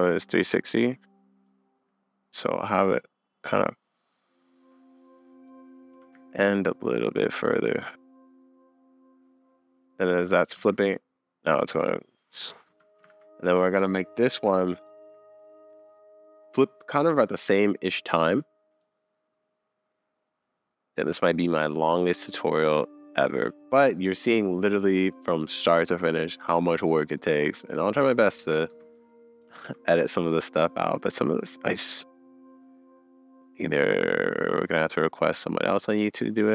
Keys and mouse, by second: 1.4 click, 5.9 g, 7.6 click, 9.2 middle click, 10.6 space, 12.7 space, 13.1 super+s, 13.6 click, 18.8-19.3 middle drag, 19.3-19.7 middle drag, 28.4 space, 28.7 space, 29.6 super+s, 32.5 middle click, 33.4-35.9 middle drag.